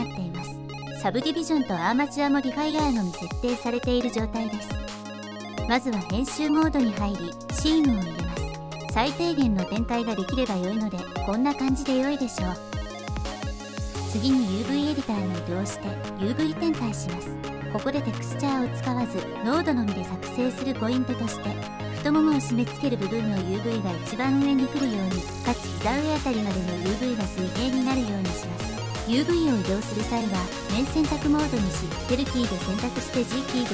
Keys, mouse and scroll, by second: 0.8 click, 1.6 click, 6.9 Tab, 7.6 2, 7.7 middle click, 8.6 middle click, 8.7 right click, 9.6 middle click, 9.8 right drag, 10.2 click, 10.5 right click, 11.0 right click.